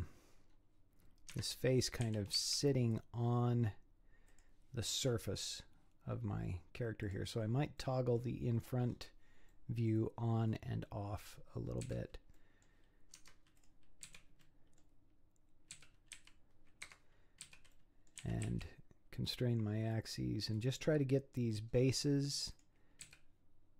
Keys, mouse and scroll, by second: 0.4-1.3 scroll up 2, 1.3 Tab, 2.0 g, 7.0 click, 7.8-8.8 middle drag, 8.8 scroll up 7, 9.5-10.5 middle drag, 10.5 scroll up 3, 11.0-11.9 scroll down 1, 11.9 z, 12.4 middle click, 13.2 Tab, 13.6 click, 14.0 z, 14.4-15.8 middle drag, 15.8 z, 16.2 g, 17.5 z, 17.7 middle click, 18.2 g, 22.5 click, 23.1 z.